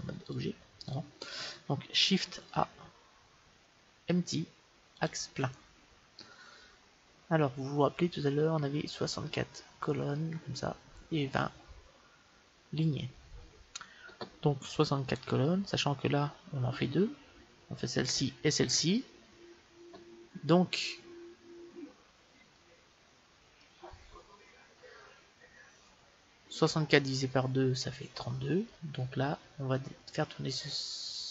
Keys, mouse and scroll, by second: 0.2 click, 0.6 click, 1.7 click, 2.4 shift+a, 21.1-21.7 scroll down 1, 21.7-28.2 middle drag.